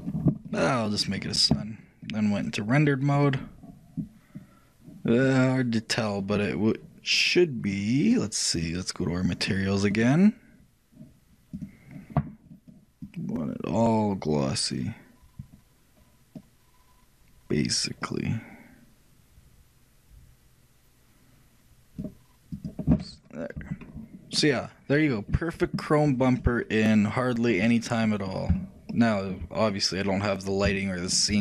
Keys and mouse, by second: 1.0-4.3 drag, 5.3-8.1 middle drag, 8.1-14.9 drag, 15.0 click, 22.7-24.4 drag, 24.4-27.2 middle drag, 27.2-29.0 drag.